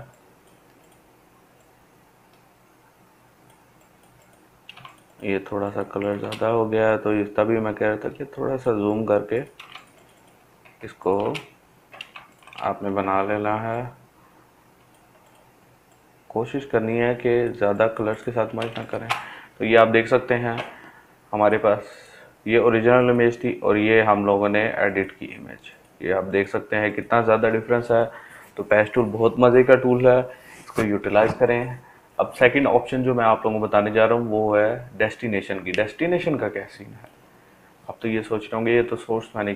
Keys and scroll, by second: 9.5 ctrl+space, 16.0 ctrl+space, 39.0 ctrl+j.